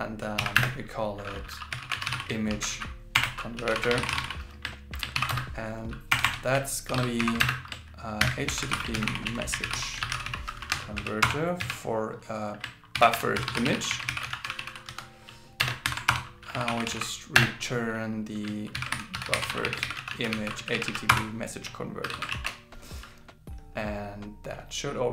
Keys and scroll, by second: 2.5 shift+c, 5.1 shift+., 6.9 shift+8, 7.2 shift+., 8.2 shift+h, 8.9 shift+m, 10.2 shift+c, 12.9 shift+b, 14.1 shift+i, 15.9 alt+8, 18.7 shift+b, 19.8 shift+i, 22.0 shift+8, 23.3 super+s.